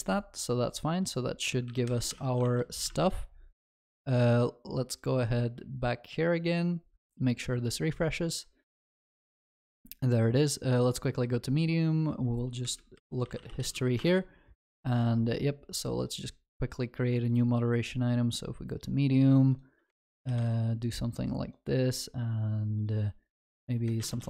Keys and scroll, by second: 2.1 ctrl+s, 2.1 ctrl+y, 2.5 ctrl+s.